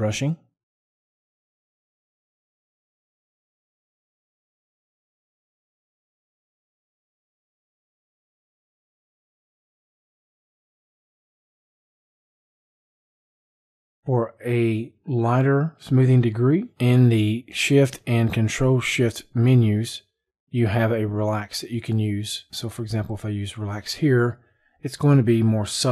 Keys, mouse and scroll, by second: 19.3 click, 23.2 click.